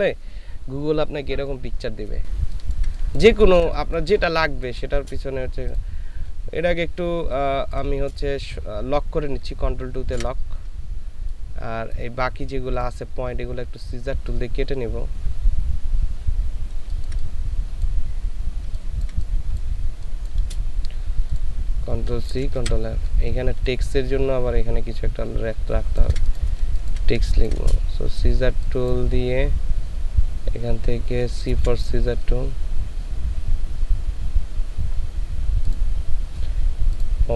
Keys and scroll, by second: 2.4 ctrl+space, 7.2 ctrl+space, 10.1 ctrl+KP_2, 16.8 ctrl+space, 18.6 ctrl+space, 22.3 ctrl+c, 22.6 ctrl+f, 26.6 ctrl+alt+shift+f, 26.7 ctrl+alt+shift+space, 31.5 c.